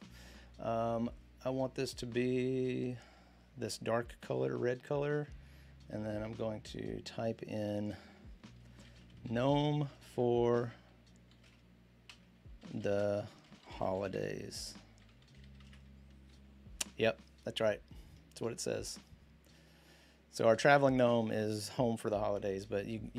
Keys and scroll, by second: 8.4-15.1 typing, 11.9 Return, 16.2 typing, 21.0-21.7 typing.